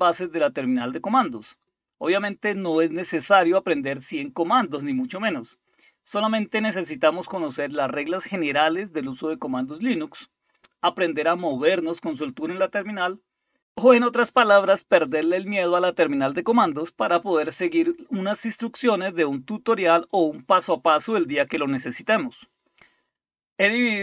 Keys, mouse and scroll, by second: 0.0-1.9 typing, 3.4-4.1 typing, 4.2 Return, 5.5-6.2 typing, 6.5 Return, 7.7-11.9 typing, 15.4-19.2 typing, 20.3-21.9 typing.